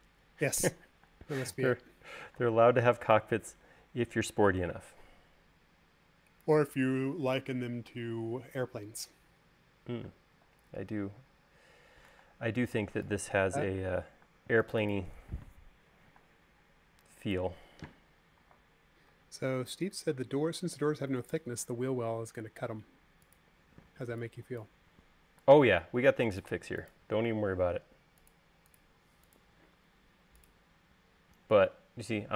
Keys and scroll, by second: 2.0 space, 3.2 m, 4.4 Left, 5.5 Up, 8.8 space, 9.9 e, 11.0 space, 11.6 ↻, 15.2 space, 17.0 m, 20.0 Tab, 24.7 e, 26.3 space.